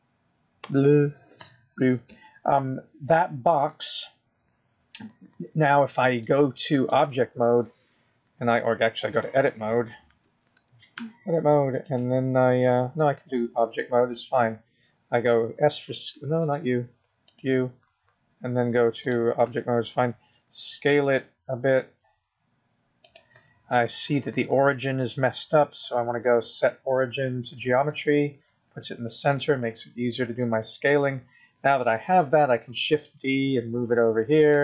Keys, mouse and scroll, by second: 8.6 click, 11.5 Tab, 12.5 Tab, 13.0 Tab, 13.4 Tab, 14.3 click, 18.0 s, 19.7 click, 21.5 click, 22.9 s, 28.1 click, 31.7 s.